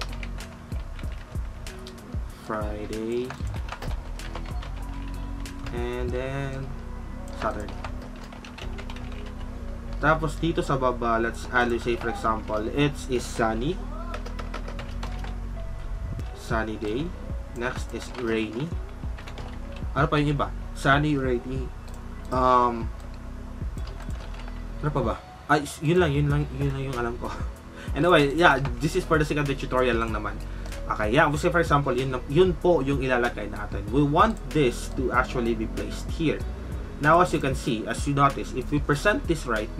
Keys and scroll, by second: 0.0-10.0 typing, 11.7 typing, 13.1-19.8 typing, 22.5-22.9 typing, 24.0 typing, 24.1 ctrl+shift+a.